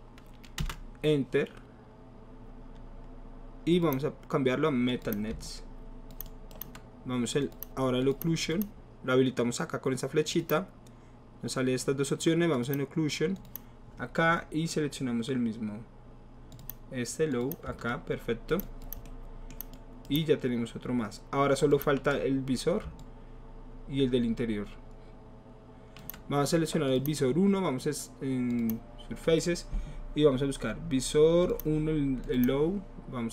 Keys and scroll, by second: 0.6 Return.